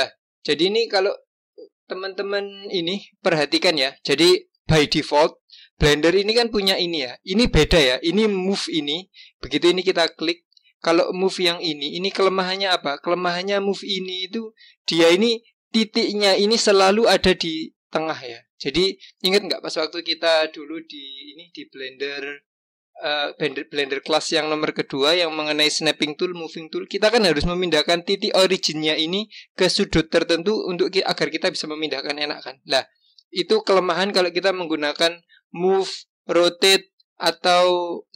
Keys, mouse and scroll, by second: 8.4-10.2 drag, 13.3 click, 14.8-17.9 drag, 36.3-38.1 drag.